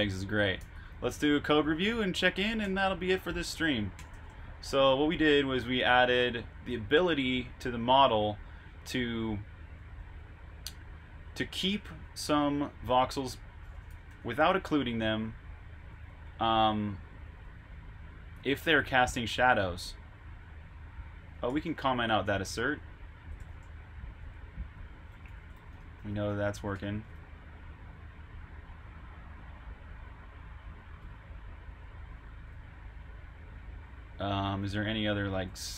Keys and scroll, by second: 0.5-2.7 typing, 3.8-4.8 typing, 6.1-6.8 typing, 9.4-11.9 typing, 13.6-17.0 typing, 18.5-19.3 typing, 23.0-26.9 typing, 28.6 typing, 31.8 super+b, 32.1-33.0 typing, 34.1-34.9 typing.